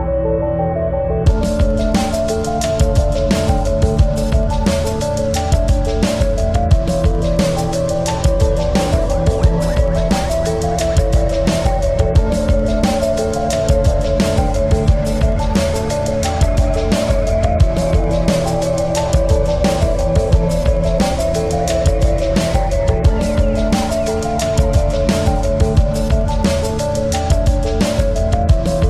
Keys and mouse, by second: 0.0 space, 0.1 click, 0.5 space, 1.4-7.8 shift+drag, 3.9 typing, 7.6 typing, 7.8 ctrl+-, 8.7 space, 9.1 click, 9.2 space, 10.3-10.6 typing, 10.6 click, 11.9 space, 12.1 click, 12.4 space, 16.3 right click, 17.4 click, 18.3-20.4 shift+drag, 20.3 typing, 22.3 click, 22.3 typing, 24.9 click, 24.9 typing, 26.0 click, 26.0 typing, 27.1 click, 27.1 typing.